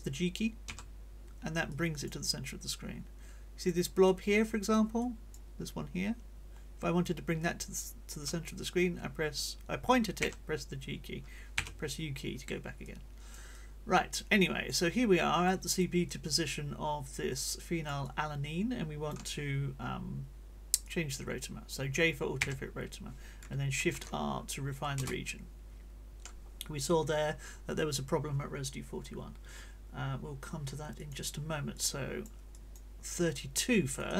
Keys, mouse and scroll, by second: 0.6 g, 1.7-3.8 drag, 4.0 click, 5.0 click, 10.2 g, 11.6 u, 12.8-14.6 drag, 14.7 click, 15.4 click, 16.4-17.6 drag, 18.0-19.3 drag, 18.0-19.3 right drag, 20.8-21.9 drag, 22.4 Return, 23.9 shift+r, 25.0 Return, 31.0 click, 31.7 click, 32.6 click, 33.8 click.